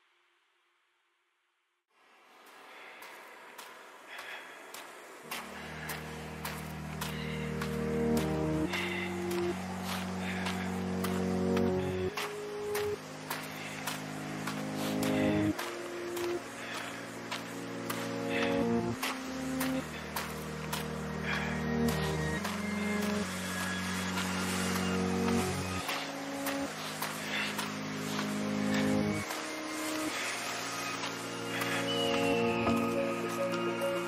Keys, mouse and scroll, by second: 1.4 a, 1.7 middle click, 8.9-12.6 middle drag, 9.5 a, 9.8 a, 12.6 b, 13.7 z, 14.1-15.7 middle drag, 25.3 e, 27.8 a, 30.2 b, 33.1-34.0 drag.